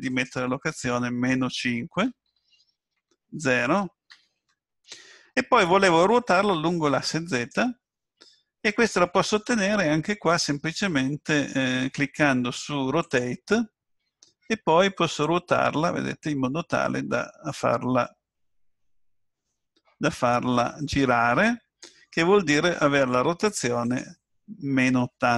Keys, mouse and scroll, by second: 0.1 click, 13.0 click, 15.2 click, 23.9 click.